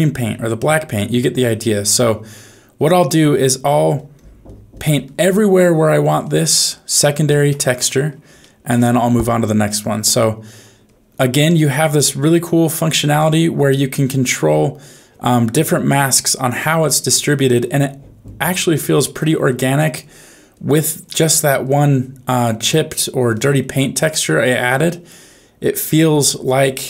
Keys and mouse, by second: 0.2 click, 0.5 click, 0.9 click, 1.3 click, 1.7 click, 2.0 click, 2.4 click, 2.7 click, 3.0 click, 3.4 click, 3.7 click, 3.9 click, 4.1 click, 4.4 click, 4.7 click, 6.9 shift+middle click, 8.4 shift+middle click, 10.5 click, 10.8 click, 11.0 click, 11.3 click, 12.0-13.0 drag, 13.2 click, 13.7 click, 14.0 click, 14.4 click, 15.5 click, 15.9 click, 16.2 click, 16.6 click, 17.0 click, 17.4 click, 17.8 click, 18.2 click, 18.7 click, 19.1 click, 19.5 click, 20.0 click, 20.5 click, 21.0 click, 21.2 click, 21.6 click, 21.9 click, 22.2 click, 22.5 click, 23.3 click, 23.5 click, 23.9 click, 24.2 click, 24.5 click, 25.1 click, 25.7 click, 26.1 click, 26.5 click.